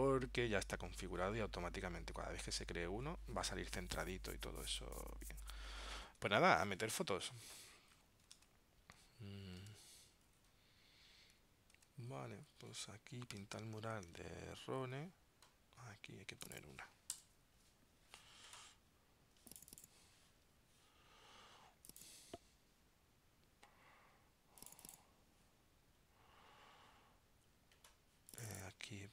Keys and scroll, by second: 6.6 super+Tab, 8.5 super+Tab, 9.7 super+Tab, 11.8 super+Tab, 13.6 super+Tab.